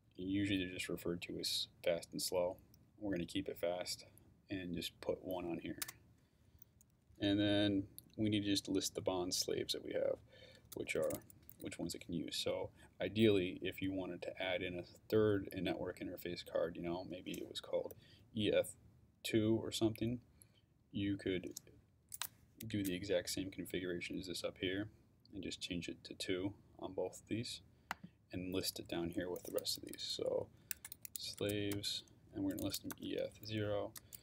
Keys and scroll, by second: 5.8 shift+Return, 10.5-11.8 typing, 30.0-34.2 typing.